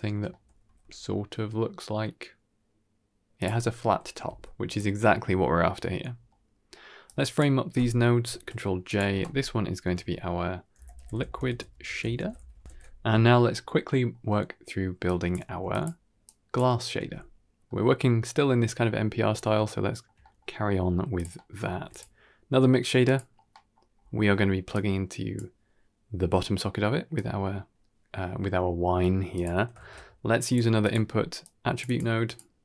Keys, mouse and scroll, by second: 0.2 middle click, 0.5 r, 5.3-6.6 scroll down 5, 5.6-5.9 middle drag, 6.2-6.6 middle drag, 6.9-7.3 drag, 8.1 ctrl+j, 8.7 click, 9.0 F2, 12.6 ctrl+s, 13.7 middle click, 14.2 middle click, 14.9 click, 15.3 g, 16.1-16.5 drag, 16.9 g, 17.6 middle click, 17.6 scroll up 2, 19.1-19.6 scroll up 2, 19.6-19.9 shift+middle drag, 20.1 middle click, 20.5 middle click, 21.0 click, 21.3 middle click, 21.6 shift+d, 22.9 middle click, 23.4 middle drag, 23.6 scroll down 1, 23.8-24.6 scroll up 3, 24.6-25.2 drag, 27.1 click, 27.9 click, 28.9-29.3 drag, 28.9 middle click, 29.7 shift+a.